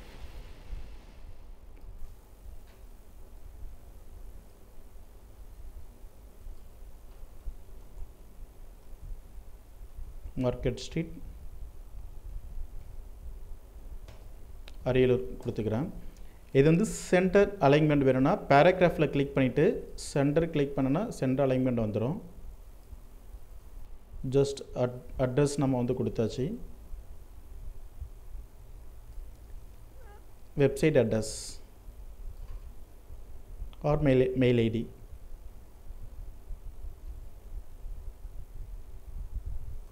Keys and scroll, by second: 14.5 ctrl+Return, 22.4 ctrl+t.